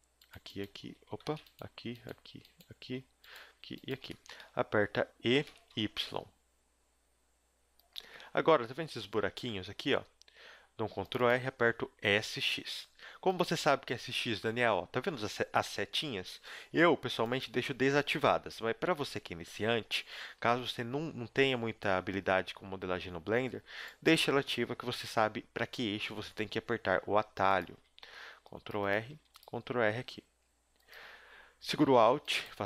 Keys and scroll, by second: 1.2 ctrl+z, 5.4 e, 9.1 a, 9.5 ctrl+r, 12.0 s, 26.2 g, 27.8 a, 28.1 ctrl+r, 29.0 a, 29.2 ctrl+r, 31.8 a.